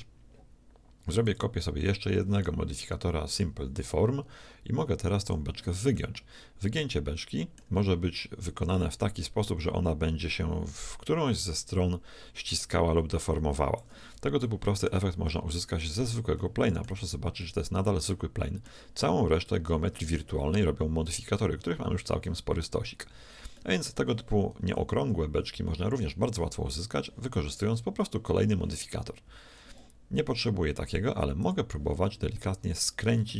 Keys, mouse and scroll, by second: 3.4-6.9 drag, 6.1-7.9 middle drag, 8.8-10.7 drag, 14.5 middle click, 16.0 Tab, 16.4 middle click, 17.0 z, 17.9-20.0 middle drag, 23.0 Tab, 23.6-24.8 middle drag, 24.6 KP_1, 25.0 KP_7, 25.4 middle click, 29.3 z, 31.5-33.3 drag, 32.3-33.3 middle drag.